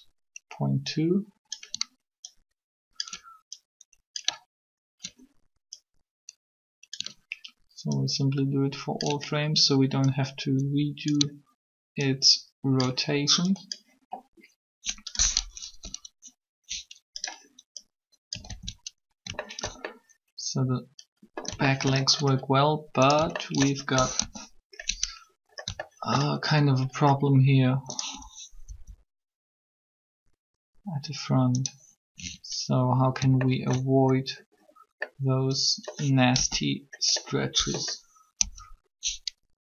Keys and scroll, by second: 15.4 Up, 15.7 Up, 18.4 alt+a, 19.6 alt+shift+a, 24.0 alt+shift+3, 28.6 r, 36.1 z, 38.4 3.